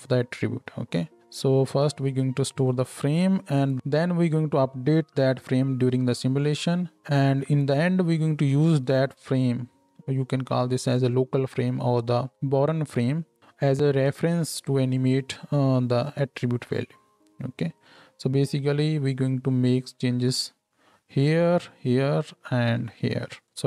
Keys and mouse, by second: 2.7-23.6 shift+drag.